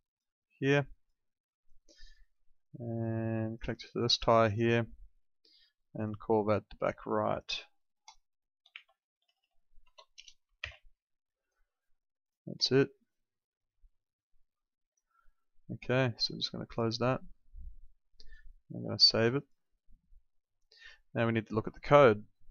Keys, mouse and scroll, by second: 8.6 shift+r, 9.1 Left, 9.8 Right, 10.1 BackSpace, 10.6 shift+b, 12.2 click, 16.6 click, 18.1 right click, 19.4 click.